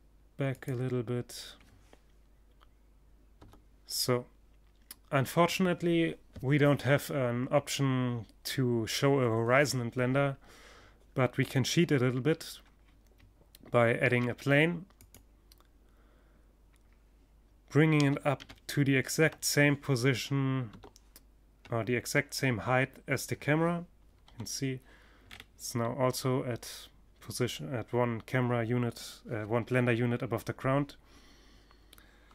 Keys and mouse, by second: 1.8 KP_0, 3.5-12.5 middle drag, 12.5 shift+a, 16.4 g, 22.7 KP_3, 23.7-26.2 middle drag, 32.2 KP_7.